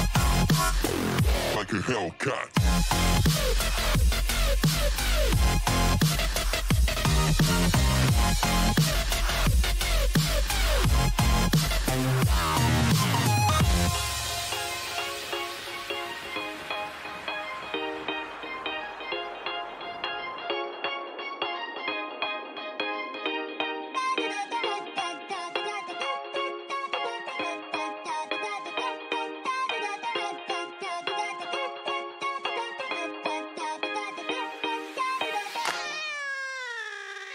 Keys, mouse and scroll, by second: 0.3 n, 1.6-6.1 middle drag, 3.7 b, 7.5-10.7 middle drag, 9.2 z, 10.7 Delete, 12.3 middle click, 13.8 middle click, 14.0 middle click, 16.8-18.8 middle drag, 23.0-25.2 typing, 26.3-30.6 middle drag, 30.6-32.6 drag, 31.6 ctrl+r, 33.5 a, 34.6 b, 36.3 g.